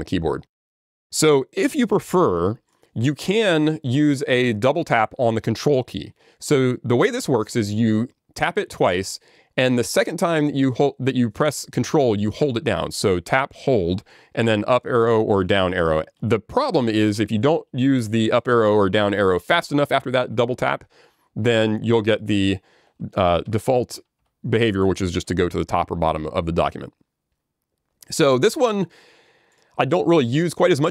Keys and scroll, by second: 17.2 ctrl+Down, 18.2 ctrl+Up, 19.4 ctrl+Down, 23.5 Escape.